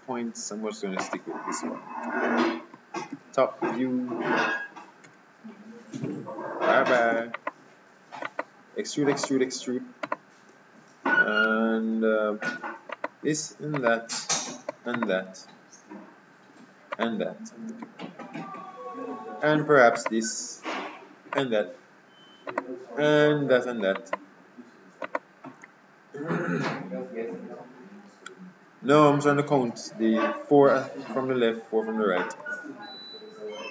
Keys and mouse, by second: 3.2 KP_7, 5.1 z, 7.5-12.1 right drag, 13.1-16.9 right drag, 17.0-18.9 right drag, 20.1-27.0 right drag, 33.0 KP_7.